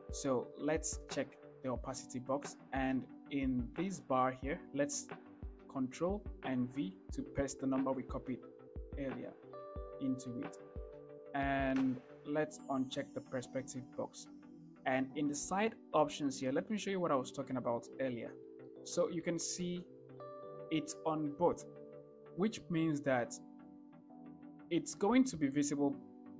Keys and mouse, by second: 2.0-5.1 drag, 6.9 ctrl+v, 13.4-18.4 drag.